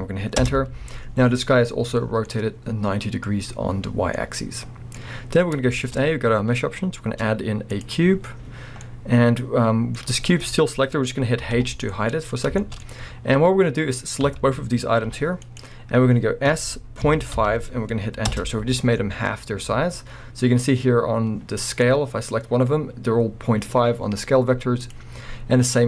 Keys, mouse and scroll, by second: 0.4 Return, 2.3-15.6 middle drag, 5.0-5.7 scroll, 11.5 h, 12.9-13.9 scroll up 2, 13.9-14.2 scroll up 1, 14.2 a, 15.1 g, 15.6 right click, 16.5 s, 18.4 Return, 19.2 scroll up 1, 21.7 click, 24.4 scroll up 1, 24.8 click.